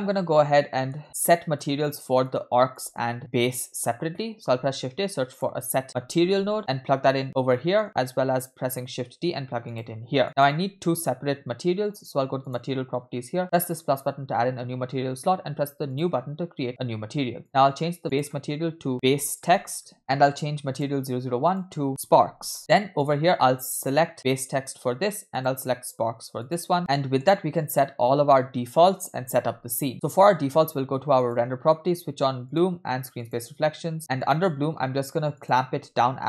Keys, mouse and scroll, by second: 0.2 middle click, 1.0-1.6 scroll up 3, 1.6 click, 2.3-2.9 drag, 4.0 scroll up 2, 4.4 shift+a, 7.5 middle click, 8.8 shift+d, 10.2 click, 12.5 click, 13.6 click, 15.9-16.3 drag, 18.1-20.0 drag, 20.0 BackSpace, 20.8 click, 21.5-22.6 drag, 23.0 drag, 23.8 click, 25.4-26.6 drag, 26.8 middle click, 26.8-27.1 scroll down 3, 27.7-28.8 scroll down 1, 28.8-29.6 scroll down 1, 31.2 click, 32.5 drag, 33.2 click, 34.2 click, 35.4-36.2 drag.